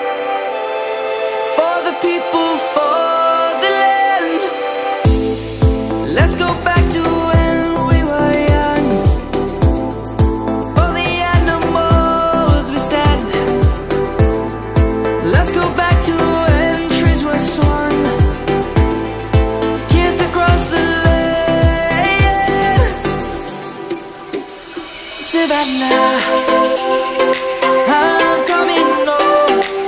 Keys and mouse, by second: 0.3 click, 1.6 shift+middle click, 3.3 ctrl++, 3.7 ctrl++, 4.1 ctrl++, 4.3 ctrl++, 4.6 ctrl++, 4.9 ctrl++, 6.3 2, 6.9 ctrl++, 7.3 ctrl++, 7.4 ctrl++, 8.4 1, 8.9 ctrl++, 9.1 ctrl++, 9.3 ctrl++, 10.0 Tab, 10.6 click, 11.2 Tab, 11.6 click, 15.7 o, 15.7 p, 16.4 click, 16.9 Tab, 24.5 click, 25.1 middle click, 26.7 click, 27.5 Tab, 29.5 3.